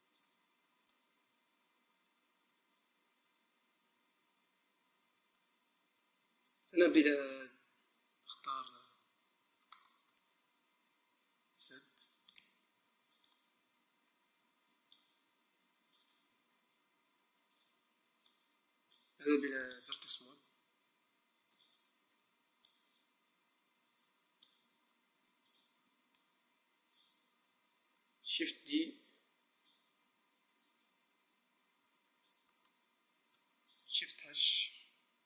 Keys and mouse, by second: 6.1 KP_1, 7.8 z, 8.8 Tab, 9.3 middle click, 11.4 z, 12.6 b, 15.2 a, 16.2 b, 19.5-21.2 drag, 21.4 a, 22.0 b, 25.2 middle click, 25.8-28.9 middle drag, 28.9 shift+d, 32.5-34.3 right drag, 34.3 shift+h.